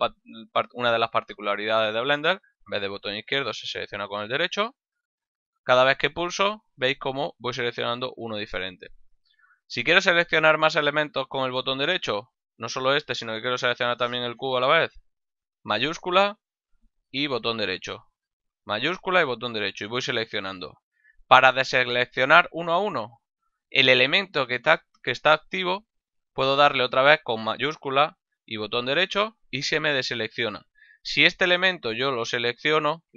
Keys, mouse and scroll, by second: 4.3 right click, 15.2 shift+right click, 18.8 shift+right click, 28.2 shift+right click, 31.9 shift+right click.